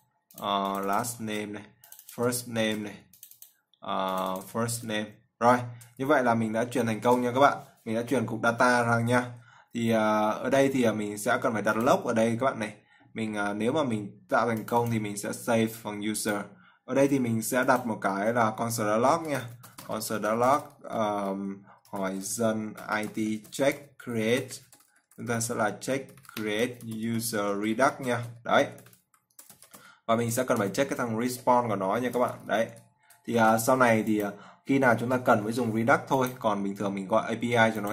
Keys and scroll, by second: 1.8 ctrl+v, 3.1 ctrl+c, 5.2 ctrl+v, 7.0 ctrl+s, 33.9 ctrl+s.